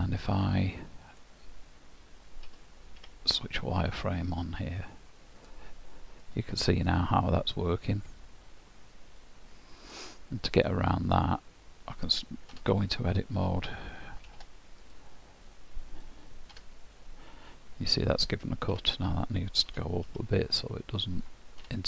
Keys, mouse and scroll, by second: 1.1 right click, 3.0 q, 6.3 middle click, 7.9 middle click, 10.6 click, 12.6 Tab, 14.3 ctrl+r, 16.1-16.6 scroll down 1, 16.6 Tab, 18.7 Tab, 19.7 g, 21.7 Tab.